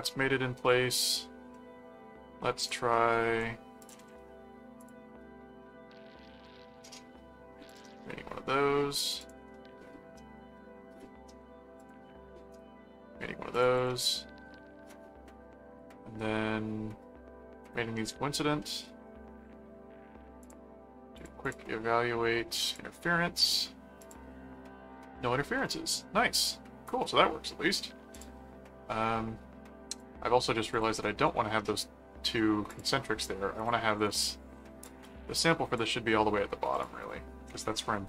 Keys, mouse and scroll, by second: 1.0 click, 1.5 middle click, 2.6 click, 2.9 middle click, 3.8 ctrl+click, 4.8 click, 7.7 click, 9.2 click, 9.4 middle click, 10.5 middle click, 11.8 click, 12.5 right click, 13.5 click, 17.6 right click, 18.6 middle click, 20.4 click, 21.2 click, 22.7 click, 24.0 click, 24.9-26.6 middle drag, 26.9 middle click, 28.1 click, 29.9 click, 30.7 click, 32.7 click, 33.6 click, 34.1 Return, 34.9 click, 36.7 click, 37.5 ctrl+middle click.